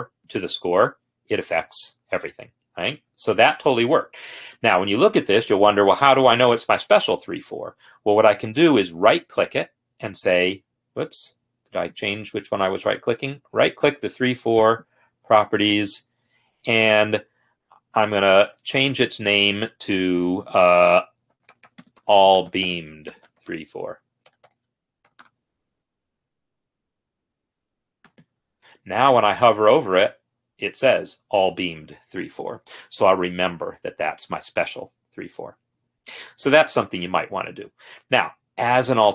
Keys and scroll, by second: 18.7 ctrl+a, 21.5-26.0 typing.